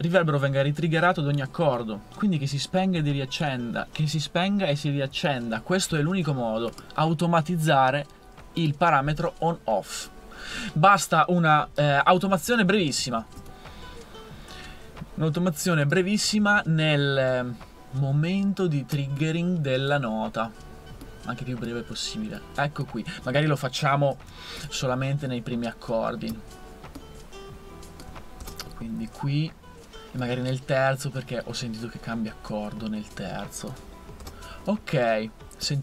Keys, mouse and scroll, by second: 11.9 super+1, 12.1 super+1, 12.3 super+1, 12.5 super+1, 15.3 super+1, 16.0 super+1, 16.3 super+1, 16.5 super+1, 24.1 super+2, 24.3 super+2, 24.6 super+2, 24.8 super+2, 28.4 super+d, 34.2 super+d.